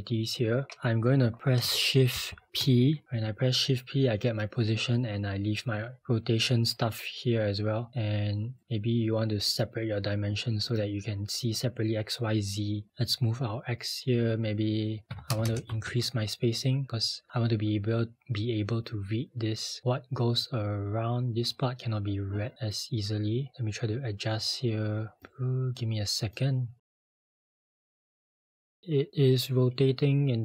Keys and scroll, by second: 2.1 p, 14.9-15.8 typing.